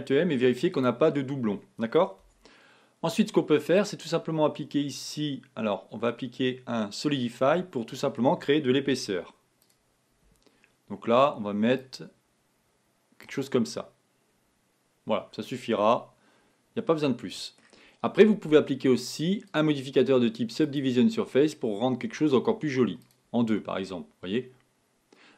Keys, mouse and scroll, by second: 2.4 Tab, 3.8-6.8 drag, 7.6-8.9 middle drag, 8.9 z, 11.8-13.8 drag, 13.8-16.7 middle drag, 19.5-22.6 drag, 23.2 click, 23.6-25.3 middle drag.